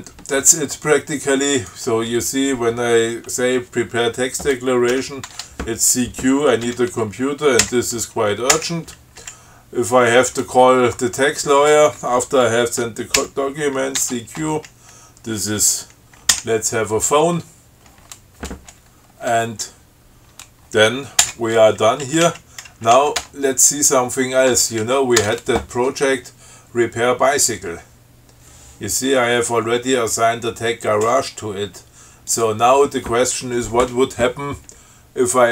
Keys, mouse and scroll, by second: 1.7 click, 5.0 ctrl+c, 5.4 ctrl+q, 6.8 c, 7.8 u, 8.7 Return, 13.3 ctrl+c, 14.2 ctrl+q, 16.5 o, 21.4 Return, 22.2 Down, 22.8 Left, 23.3 Tab, 24.7 Down, 25.3 Tab, 32.4 click.